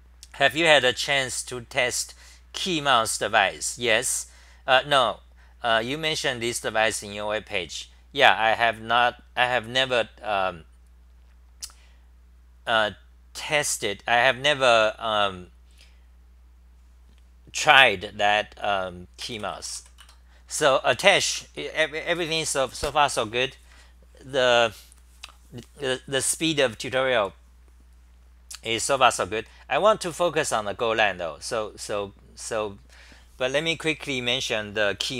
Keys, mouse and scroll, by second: 20.1 Return, 21.3 super+r, 29.3-30.0 typing.